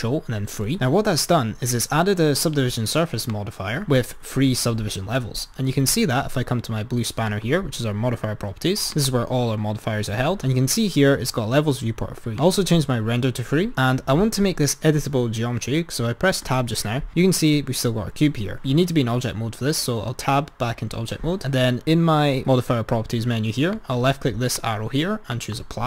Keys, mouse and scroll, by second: 0.5 ctrl+3, 3.2 click, 7.2-8.6 drag, 9.0-16.5 drag, 16.5 Tab, 18.5 Tab, 23.7-25.8 drag.